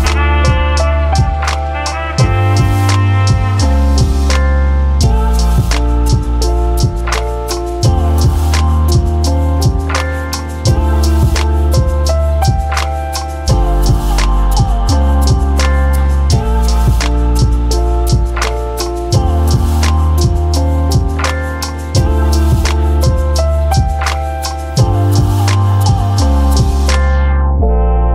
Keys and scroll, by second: 1.5 ctrl+d, 1.9-3.0 typing, 9.1 ctrl+d, 14.6 Delete, 19.1 ctrl+d, 20.9 ctrl+d, 24.9 ctrl+d.